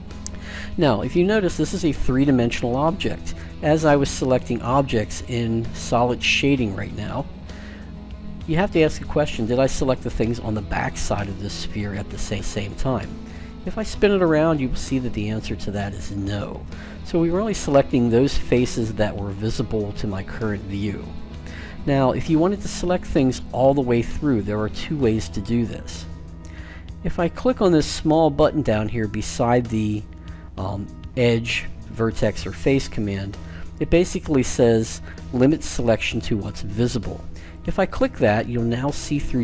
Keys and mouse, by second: 12.1-14.0 middle drag, 37.4-39.4 drag.